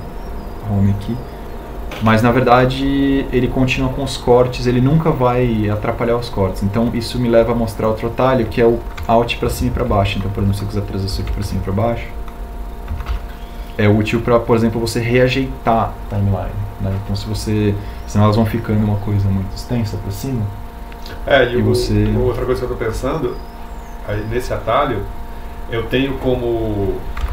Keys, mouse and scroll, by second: 2.2 alt+e, 12.4 alt+Down.